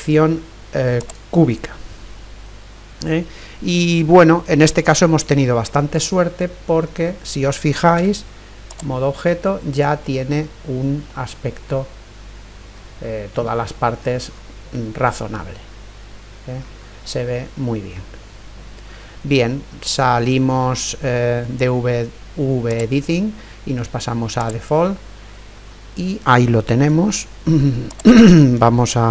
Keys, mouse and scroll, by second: 6.1-16.2 middle drag, 8.0 Tab, 16.8-19.1 middle drag, 24.6 click, 25.5-26.0 scroll down 1, 26.0-27.7 middle drag, 27.7 scroll up 1, 27.9-29.1 drag.